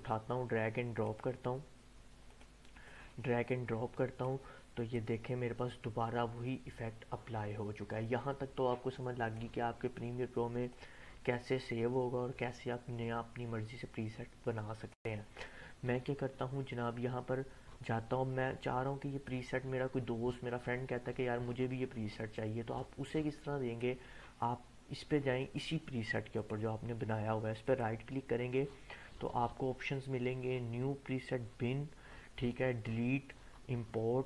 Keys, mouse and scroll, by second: 0.3-1.2 click, 3.1-4.4 drag, 19.2-23.9 drag, 27.6 right click.